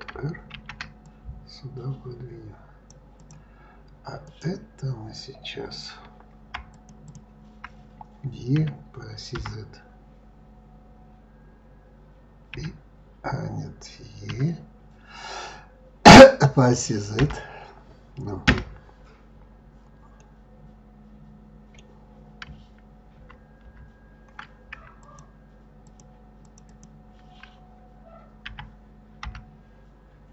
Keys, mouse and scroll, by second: 0.5 ctrl+r, 4.2 click, 6.7 shift+click, 7.0 shift+click, 8.6 e, 20.2-23.2 middle drag, 23.2 ctrl+z, 23.6 ctrl+z, 24.9 shift+click, 25.8 shift+click, 26.4 shift+click, 26.7 shift+click, 28.5 e.